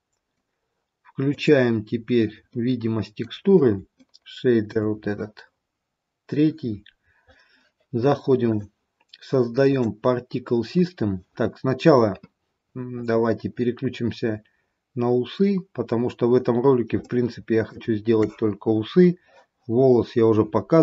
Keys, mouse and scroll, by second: 1.5 click, 2.6 middle click, 4.1 shift+middle click, 8.4 click, 9.6 click, 17.0 shift+middle click.